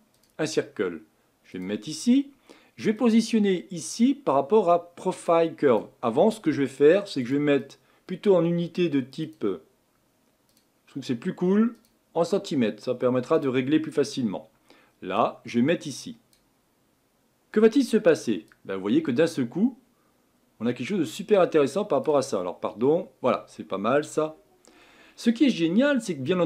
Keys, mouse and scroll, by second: 5.8 click, 13.4-16.3 drag, 18.8-21.8 drag, 23.6 middle click, 24.2-24.7 scroll up 5, 24.7-26.4 scroll down 1.